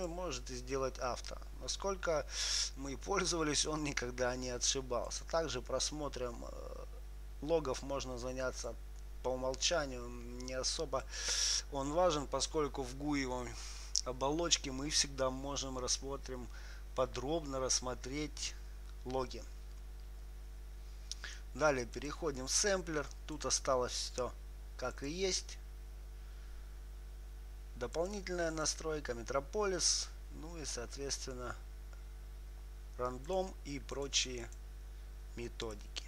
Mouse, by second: 5.4-7.6 drag, 8.9-11.2 drag, 11.4-19.8 drag, 22.3-27.2 drag, 28.3-33.6 drag, 34.3-36.0 drag.